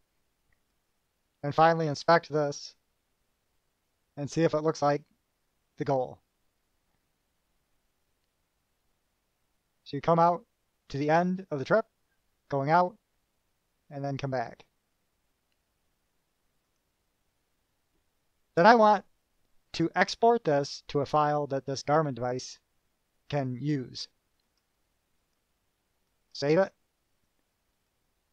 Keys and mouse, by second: 1.0 click, 2.8 click, 16.8 click, 23.5 click, 24.6 click, 25.4 right click, 26.3 click, 28.1-28.3 drag.